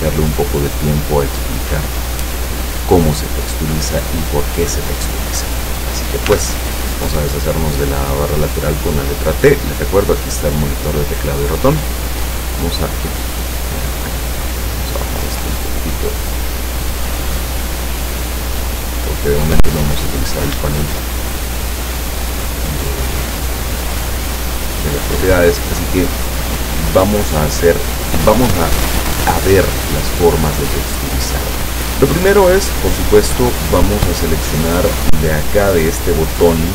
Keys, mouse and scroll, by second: 6.4 t, 11.7-13.6 drag, 14.4-15.7 drag, 16.8-19.4 drag, 21.0 shift+middle click, 21.8 shift+middle click, 33.5 click, 35.8 click, 36.5 click.